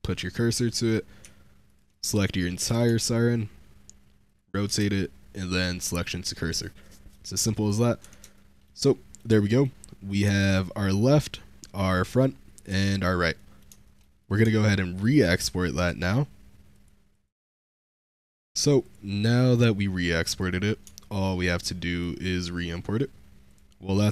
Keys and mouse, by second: 1.1 Tab, 1.8 click, 2.5 r, 2.5 z, 4.1 ctrl+click, 4.7 shift+s, 6.7 middle click, 7.4 click, 7.9 Tab, 8.2-8.5 shift+middle drag, 8.7-9.0 middle drag, 9.4 middle click, 9.9 middle click, 10.0 click, 10.2 shift+drag, 13.2 middle click, 13.7 shift+click, 13.8 middle click, 14.1 middle drag, 14.4 shift+middle drag, 14.9 middle click, 15.3 v.